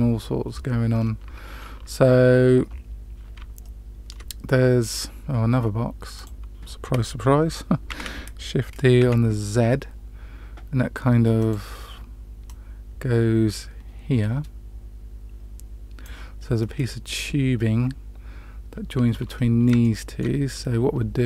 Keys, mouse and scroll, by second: 0.9-1.3 scroll down 2, 3.6-4.1 shift+middle drag, 6.1 click, 7.8 shift+d, 12.4-16.0 drag, 19.3-19.6 scroll up 2, 19.7-20.1 shift+middle drag.